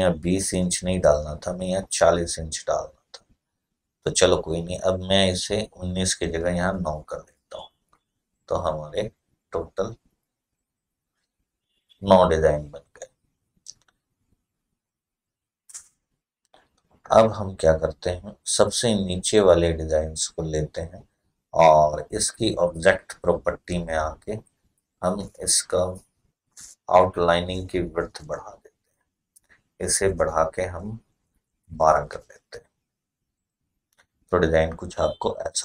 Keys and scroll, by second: 6.7 9, 7.0-11.7 Return, 31.1-32.6 typing.